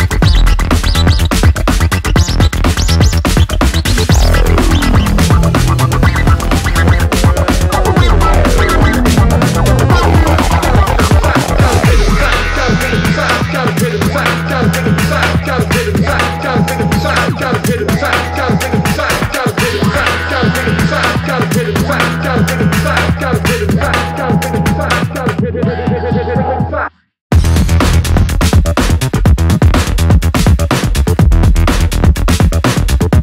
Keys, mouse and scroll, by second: 8.0 click, 8.1-9.6 drag, 14.7 click, 22.4 click, 23.5-24.4 drag, 27.8-29.8 typing, 30.6-33.2 drag.